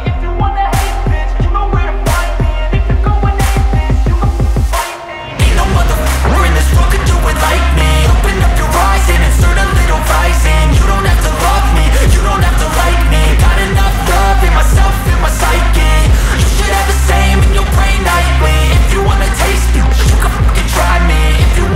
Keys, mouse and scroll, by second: 0.0-1.2 typing, 1.9 Return, 4.7 click, 4.7 typing, 5.9-6.8 typing, 8.1-8.9 typing, 9.1 Return, 12.7 click, 13.8 click, 16.3 s, 21.4-21.7 drag.